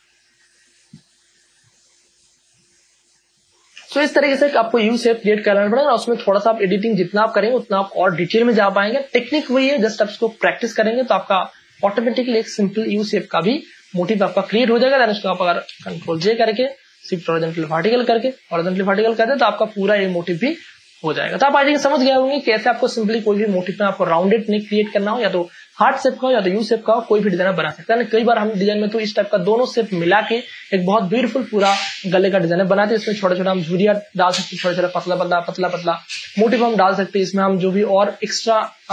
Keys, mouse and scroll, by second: 4.4 Return, 10.6 m, 11.5-12.9 drag, 12.9 ctrl+j, 13.6 click, 14.9 ctrl+j, 15.3 ctrl+a, 15.6-16.6 typing, 17.4 ctrl+d, 17.8 ctrl+e, 19.2 alt+click, 31.8 space, 32.1-36.5 ctrl+drag, 36.5 scroll up 1.